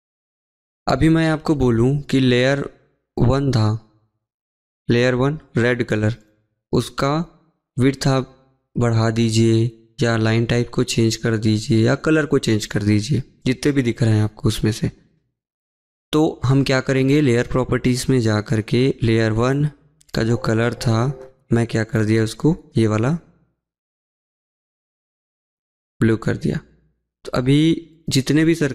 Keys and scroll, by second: 19.7 Escape, 19.7 Escape, 20.1 Escape.